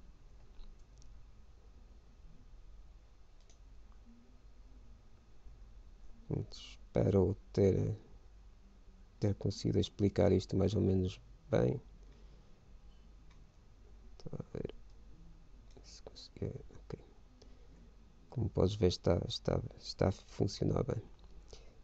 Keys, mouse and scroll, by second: 1.1 ctrl+b, 4.4-6.0 right drag, 6.7 shift+b, 11.9-15.1 middle drag, 14.7 ctrl+b.